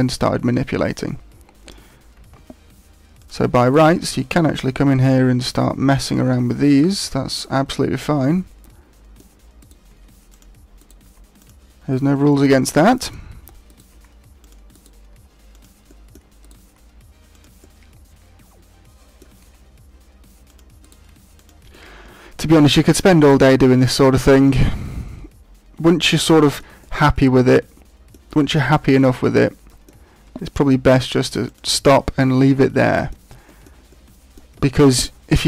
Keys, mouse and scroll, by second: 2.1 ctrl+Tab, 3.7 right click, 4.1 middle click, 5.1 middle click, 6.4 g, 6.7 click, 7.3 right click, 7.7 middle click, 9.5 right click, 9.9 g, 10.3 click, 10.7 right click, 11.0 g, 11.5 click, 12.3 middle click, 13.6 right click, 13.9 g, 14.4 click, 14.7 right click, 15.1 g, 15.9 middle click, 16.4 right click, 16.6 g, 17.4 click, 17.6 middle click, 19.4 g, 20.5 click, 20.8 right click, 21.0 g, 21.4 click, 21.7 middle click, 23.2 right click, 23.4 g, 23.9 click, 24.1 middle click, 26.7 middle click, 28.2 right click, 28.5 g, 29.0 click, 29.2 middle click, 30.3 g, 31.5 click, 31.8 middle click, 33.4 shift+middle click, 33.9 middle click.